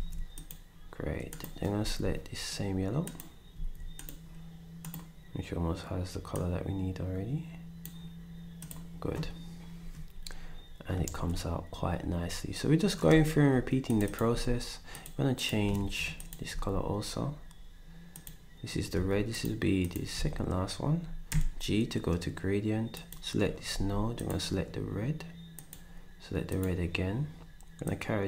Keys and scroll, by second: 1.8 d, 3.5 d, 11.1 ctrl+s, 14.3 d, 15.8 z, 16.5 d, 18.9 s, 20.1 s, 21.3 g, 23.7 d.